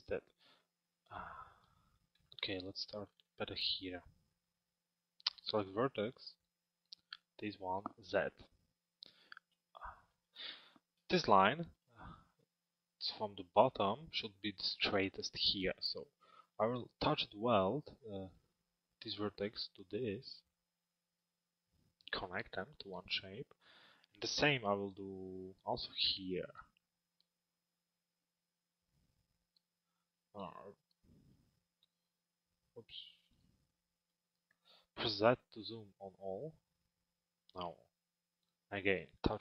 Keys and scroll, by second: 7.6 z, 34.8 z.